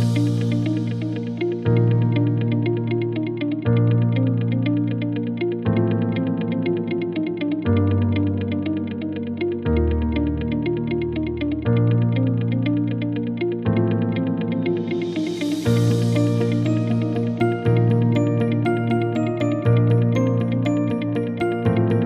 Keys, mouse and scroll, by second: 2.9-3.9 right drag, 5.2 click, 8.1-14.0 drag, 16.0-17.3 right drag, 20.7 click.